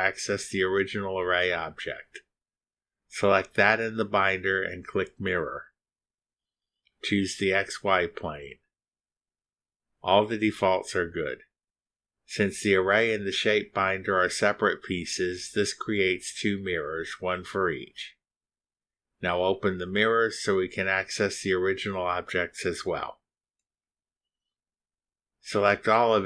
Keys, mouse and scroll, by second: 0.6 click, 1.5-3.0 drag, 6.1 click, 7.8 ctrl+click, 10.7 click, 13.6 click, 15.2 middle click, 15.2-16.0 scroll down 1, 16.3 middle click, 16.3-16.6 scroll down 1, 16.8 middle click, 16.8 scroll down 1, 16.9-18.5 drag, 18.8 click, 20.5 scroll up 1, 21.9 click, 22.3 scroll up 1, 23.3 click, 24.8-25.1 scroll up 1, 26.0 click.